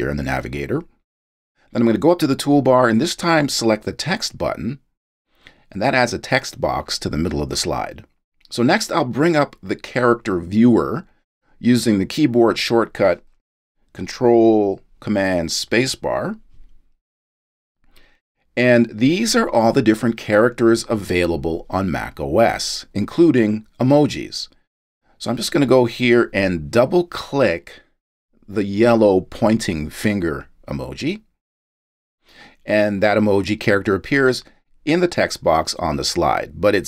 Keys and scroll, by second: 15.0 ctrl+super+space.